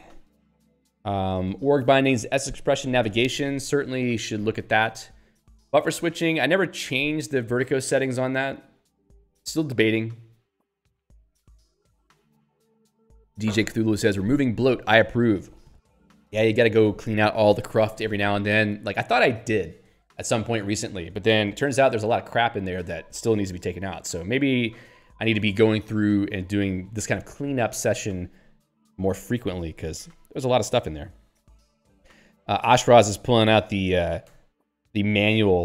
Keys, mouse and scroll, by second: 0.3 Return.